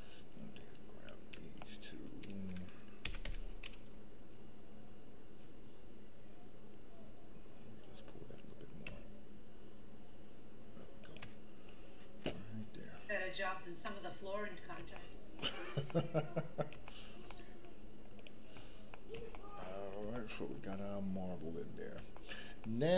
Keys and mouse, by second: 0.6 click, 1.6 shift+middle click, 3.0 g, 3.2 y, 13.8 middle click, 14.9 shift+middle click, 15.8 middle click, 16.8 shift+middle click, 17.2 middle click, 18.9 middle click, 19.3 shift+middle click, 20.1 shift+middle click, 20.7-21.7 middle drag, 22.1 shift+middle click, 22.6-22.9 middle drag.